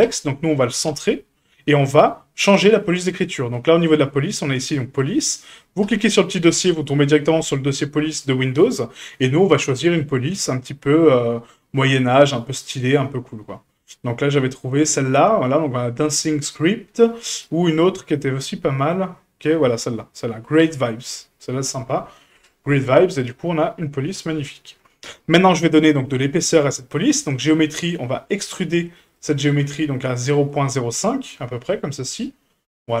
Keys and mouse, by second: 0.0-0.9 drag, 5.8 click, 22.3-22.8 middle drag, 23.3-24.4 middle drag, 28.9 click, 29.1 click, 29.2 click, 29.5 click, 30.5 click, 31.2-31.7 middle drag, 32.0-33.0 middle drag.